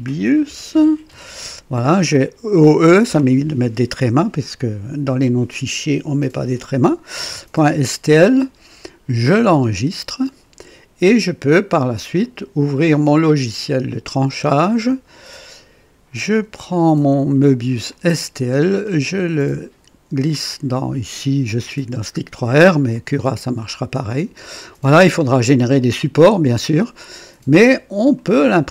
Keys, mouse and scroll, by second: 0.0-1.6 typing, 9.6 click, 12.2 click, 13.5 click, 14.2 click, 16.3 click, 17.9-20.4 drag, 22.9-27.5 drag, 28.2 click.